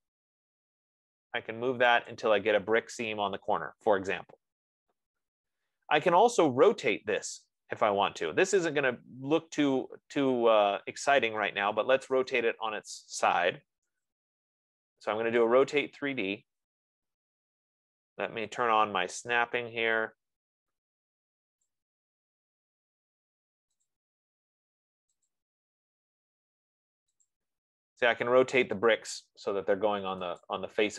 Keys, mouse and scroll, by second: 2.5 click, 2.6 F15, 4.0 middle click, 4.2 middle click, 5.6 middle click, 5.7-6.4 scroll, 12.0-16.1 typing, 17.4-18.1 typing, 22.1 click, 24.1 click, 25.6 click, 27.7 click.